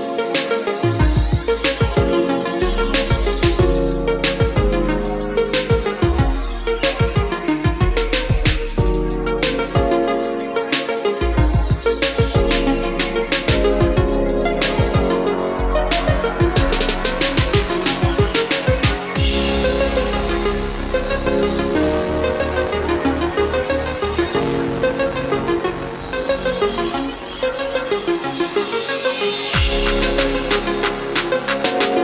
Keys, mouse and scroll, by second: 0.8-2.8 drag, 5.1 scroll down 1, 6.1-7.2 scroll up 1, 7.4-9.1 scroll down 1, 9.1-21.7 drag, 21.7-22.9 scroll down 1, 22.9 scroll up 1, 25.2-27.1 drag, 30.0-30.9 scroll down 1.